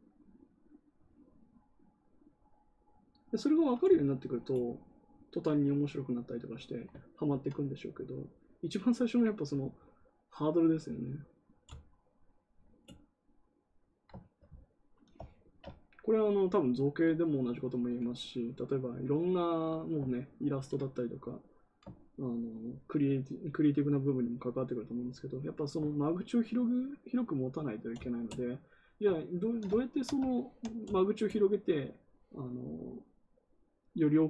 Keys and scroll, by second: 20.4 ctrl+z.